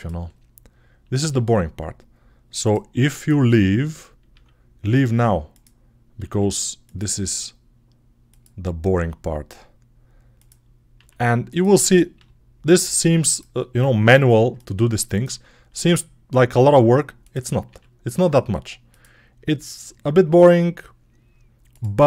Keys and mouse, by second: 1.0 g, 3.0 click, 3.1-21.5 middle drag, 4.3 e, 6.1 r, 7.1 g, 8.8 e, 10.8 r, 12.0 g, 16.4 e, 17.5 s, 19.6 g, 21.5 click.